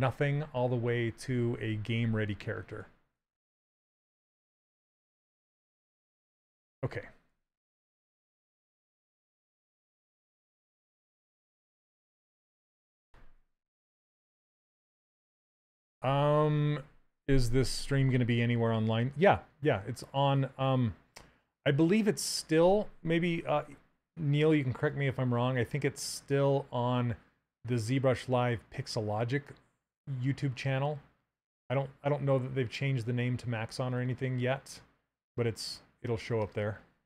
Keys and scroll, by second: 4.2 s.